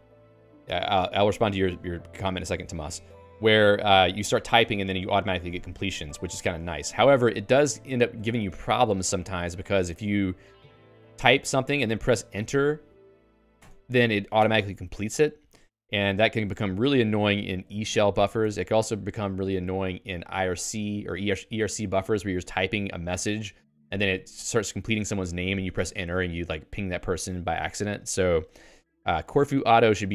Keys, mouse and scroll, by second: 7.9 space, 9.9 g, 11.5 BackSpace, 12.7 g, 13.7 Return, 14.9 Escape, 15.5 x, 17.9 d, 29.9 shift+v.